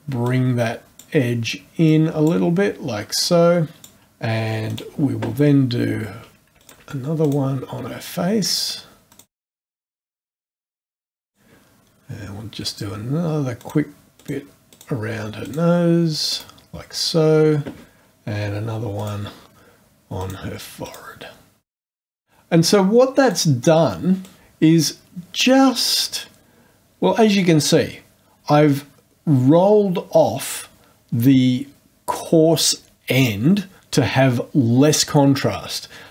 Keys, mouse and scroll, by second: 0.2 click, 1.9 click, 3.2 click, 4.6 click, 6.6 ctrl+click, 7.2 ctrl+click, 8.4 click, 9.1 click, 9.3 click, 9.4 click, 9.5 click, 9.6 click, 9.7 click, 9.7 click, 9.9 click, 9.9 click, 10.0 click, 10.3 click, 10.4 click, 10.5 right click, 10.8 click, 11.1 click, 11.3 click, 12.6 click, 13.6 click, 14.2 click, 14.7 click, 15.4 click, 16.1 click, 16.3 right click, 18.9 click, 20.2 click, 20.8 click, 21.6 click, 21.7 click, 21.8 click, 21.9 click, 22.0 click, 22.1 click, 22.1 right click, 23.2 click, 24.2 click.